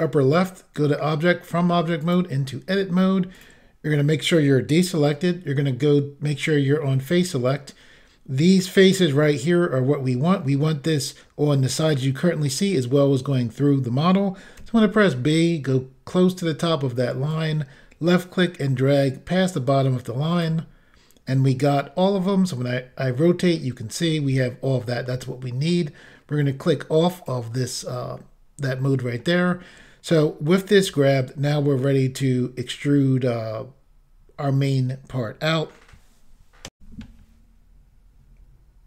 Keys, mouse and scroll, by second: 0.4 click, 2.1 click, 2.9-3.3 scroll up 1, 3.4 click, 3.9 click, 14.6 b, 17.4 click, 22.2 middle click, 27.2 click, 28.7 middle click, 36.8 Pause, 36.8 Insert.